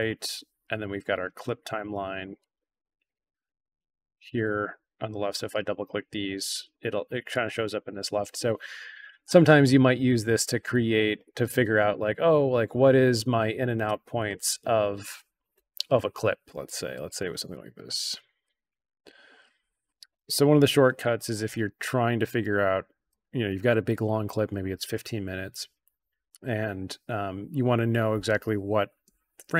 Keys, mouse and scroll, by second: 2.0-2.3 drag, 3.0 click, 3.3 click, 5.5 click, 5.7 click, 5.9 click, 7.2-7.7 drag, 9.7-10.4 drag, 16.6 click, 17.4 drag, 18.3 drag, 19.0-19.9 drag, 29.4 i.